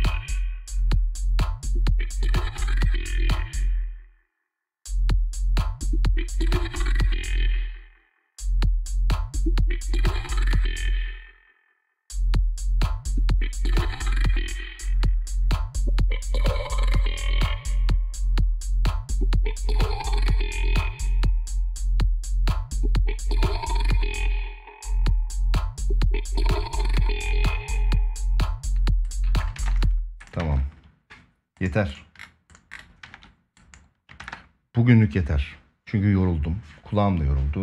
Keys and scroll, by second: 3.1 space, 6.9 space, 7.8 space, 8.3 ctrl+s, 10.3 space, 13.9 space, 17.4 space, 20.9 space, 23.6 space, 24.2 space, 25.7 ctrl+s, 29.3 ctrl+s, 30.1 space, 30.1 ctrl+s, 32.8 ctrl+s.